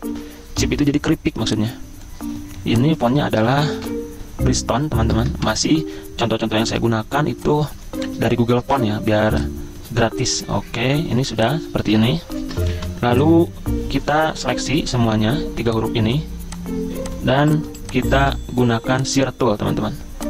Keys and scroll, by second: 0.0-0.2 typing, 0.6 Escape, 2.5-6.1 typing, 11.3 z, 12.3 ctrl+shift+], 12.8 v, 17.4 z, 18.2 v.